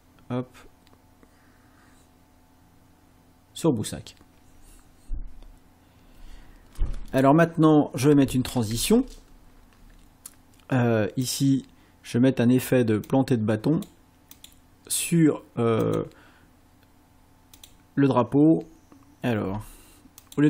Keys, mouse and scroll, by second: 7.0 scroll up 1, 8.7 space, 11.3 click, 13.1 click, 14.3 click, 15.8 click, 17.6 click, 20.2 click.